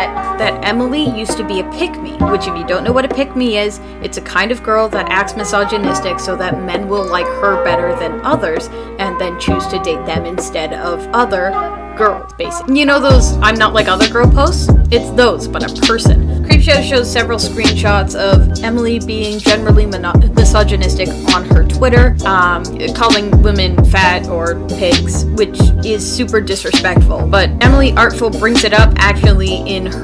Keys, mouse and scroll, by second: 0.3 space, 2.4 space, 3.7 space, 24.4 space, 25.1 space, 25.2 ctrl+z.